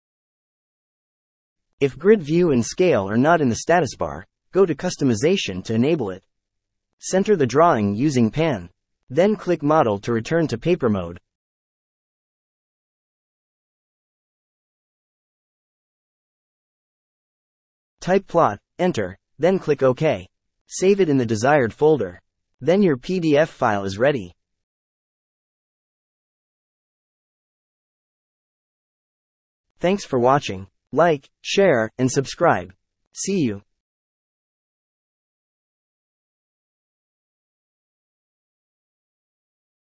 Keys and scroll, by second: 17.2-18.5 typing, 18.9 Return.